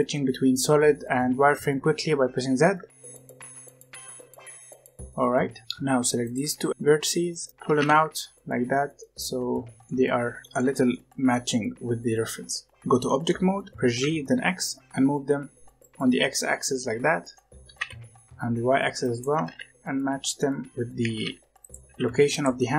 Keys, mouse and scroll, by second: 0.0-0.5 typing, 1.8 z, 2.9-4.0 typing, 5.3-5.6 scroll up 2, 5.6 click, 6.1 shift+click, 7.0 middle click, 7.6 g, 9.9-11.6 middle drag, 11.6 scroll down 1, 11.9-13.7 middle drag, 13.7 g, 16.1 scroll down 1, 16.2-17.6 middle drag, 17.6 g, 19.2 g, 20.7 scroll up 2, 20.9 g, 21.8 g, 22.5-22.7 middle drag.